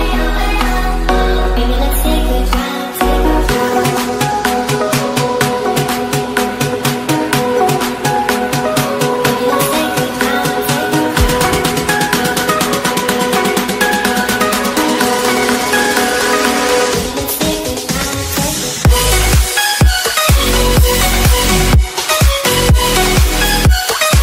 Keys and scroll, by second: 10.0 ctrl+c, 13.0 ctrl+v, 14.4 ctrl+space.